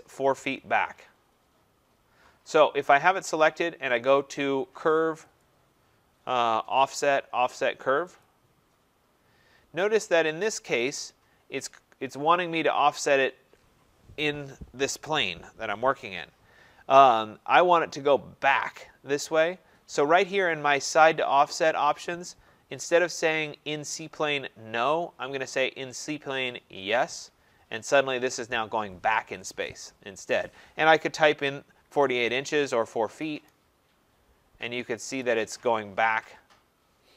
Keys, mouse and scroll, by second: 5.4 click, 8.2 click, 10.1-10.5 scroll, 26.9 click, 31.8 typing, 33.1 shift+', 35.1 Return, 36.1 middle click, 36.2 middle click.